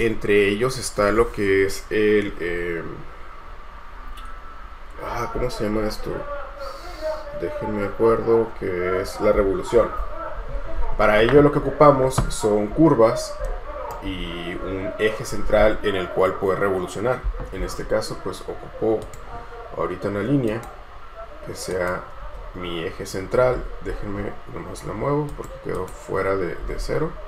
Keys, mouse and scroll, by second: 12.9-13.7 scroll up 1, 13.7 right click, 14.3-14.8 scroll up 1, 22.4 space, 23.7-25.9 scroll up 1, 26.0 double click, 26.8-27.1 scroll up 1.